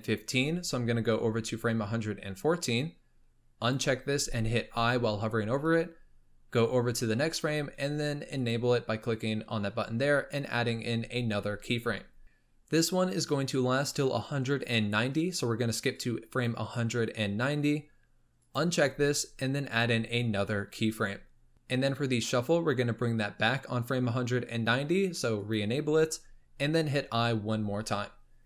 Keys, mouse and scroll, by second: 1.1 Left, 3.5 click, 4.7 i, 6.4 Right, 8.3 click, 10.5 i, 15.9-18.5 drag, 19.6 i, 25.3 click.